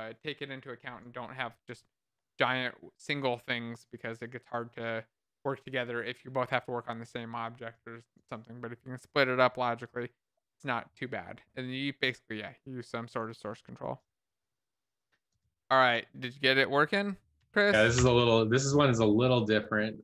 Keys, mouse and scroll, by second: 16.3 click, 17.3-18.3 typing.